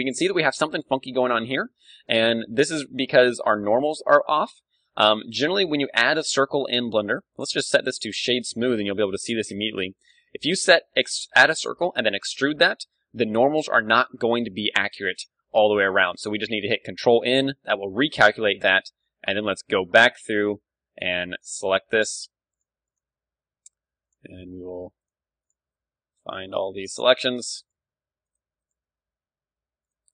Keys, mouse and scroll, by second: 1.9-4.3 middle drag, 4.3 ctrl+z, 4.6 ctrl+z, 4.8 ctrl+z, 5.0 ctrl+z, 5.2 ctrl+z, 5.8 a, 6.0 a, 7.4 w, 10.6-16.9 middle drag, 16.9 ctrl+n, 17.8 KP_1, 18.4 a, 18.8 b, 19.4 click, 21.0 middle click, 25.9 middle click, 27.0 middle click, 28.1-29.6 right drag, 29.6-30.1 middle drag.